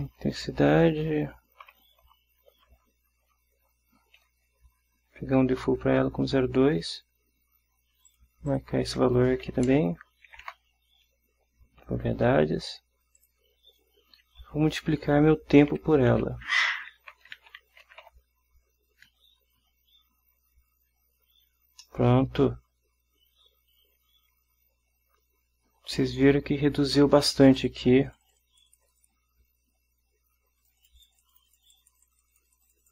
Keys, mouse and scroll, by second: 0.0-0.9 typing, 2.7 ;, 3.7 Down, 4.6 Right, 8.2 click, 8.6 click, 9.6 0, 9.8 ., 10.4 2, 10.6 Return, 13.3 click, 15.2-18.2 typing, 22.0-26.2 middle drag, 27.7 click, 28.2 click, 30.7 click.